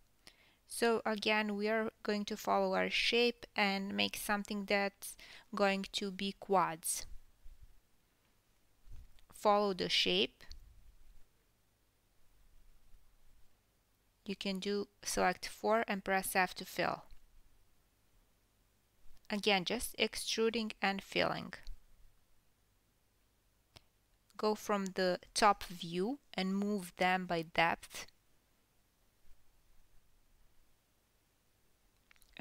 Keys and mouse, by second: 1.6 e, 3.4 e, 5.4 e, 7.3 click, 7.6 e, 9.9 click, 10.0 e, 12.0 click, 13.6-17.2 drag, 15.2 f, 15.9 f, 16.4 f, 18.0 e, 18.8-19.4 drag, 19.4-23.4 typing, 22.7 click, 23.0 click, 24.6 KP_7, 25.1 click, 25.8-30.0 typing, 26.4 click, 28.3 click, 30.3-30.9 drag, 31.5-32.1 drag, 32.1 KP_1.